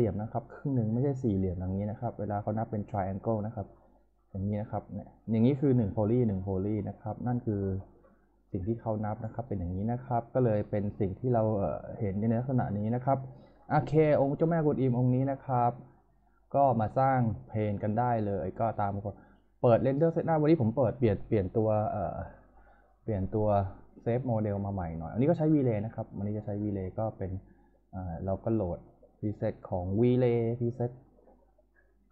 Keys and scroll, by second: 14.0 F4.